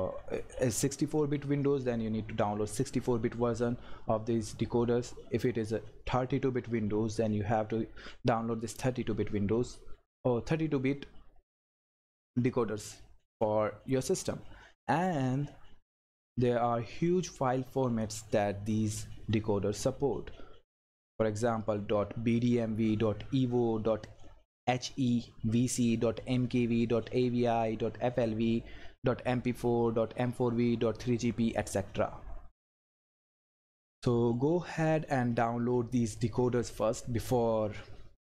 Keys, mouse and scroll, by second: 14.7 scroll down 1, 32.6 scroll down 1, 34.0 scroll up 1.